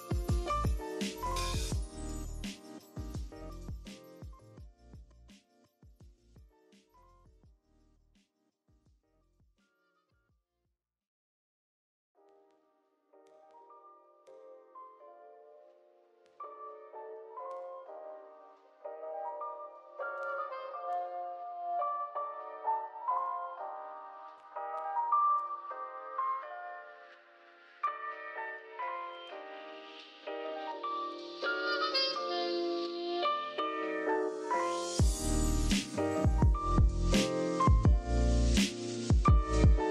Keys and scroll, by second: 0.2 super+j, 0.9 super+j, 3.6 super+g, 5.9 super+z, 8.1-9.0 typing, 12.5 super+x, 13.3 super+z, 18.9 i, 19.7 v, 25.2 z, 26.5-26.9 typing, 31.1-32.0 typing, 35.7 g, 37.1 v, 37.8 super+z, 38.1 super+z.